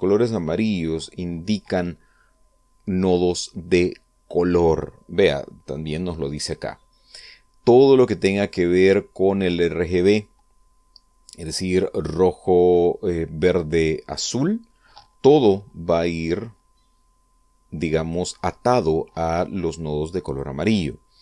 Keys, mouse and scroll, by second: 5.8 click, 17.0-18.9 drag, 19.9-21.2 drag.